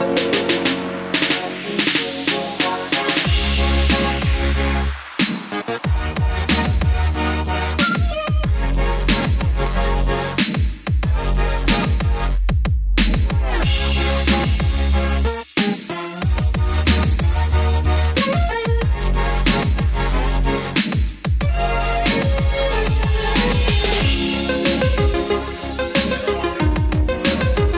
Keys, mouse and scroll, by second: 1.3-1.8 scroll down 1, 2.6-3.2 scroll up 1, 3.7-6.7 drag, 9.7 click, 10.6 scroll up 1, 11.3 scroll down 1, 13.0 click, 14.7-17.1 scroll up 1, 17.1-24.9 drag, 27.3 KP_3.